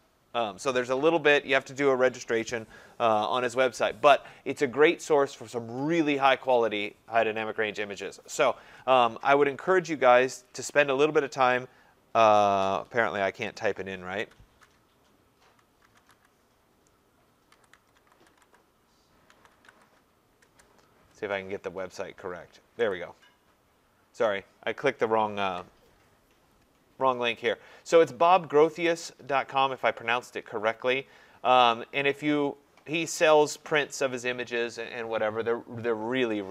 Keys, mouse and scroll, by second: 10.4 click, 13.6 click, 15.6-20.4 typing, 17.7 click, 22.9-25.5 drag, 32.4-33.5 scroll down 13, 35.0 scroll.